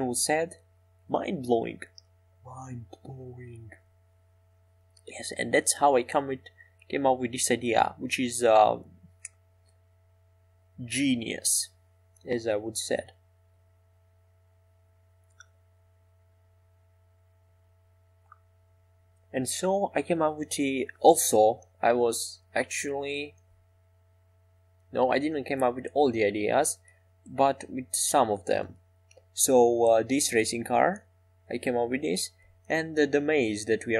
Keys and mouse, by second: 1.3 Tab, 4.9 e, 6.4 s, 13.2 Tab, 13.7 Tab, 15.1 e, 18.3-21.3 right drag, 19.2 e, 22.3 click, 22.3-28.5 right drag, 30.1-31.1 drag, 30.1-31.1 right drag, 31.1 e.